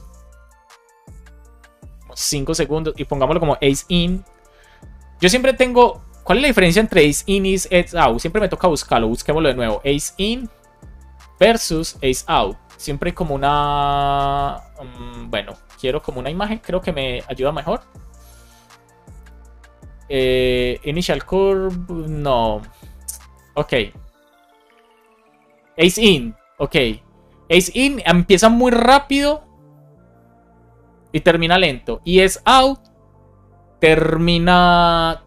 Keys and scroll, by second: 0.8 Left, 1.4 BackSpace, 2.0 super+s, 7.3 super+s, 8.2 super+t, 9.8 space, 11.4 space, 12.0 Return.